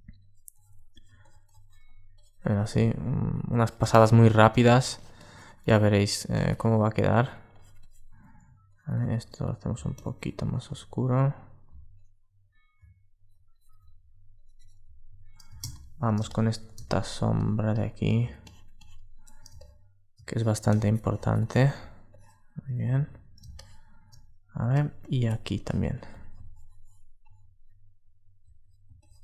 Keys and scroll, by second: 15.3 super+space, 22.7 super+1, 24.4 super+space.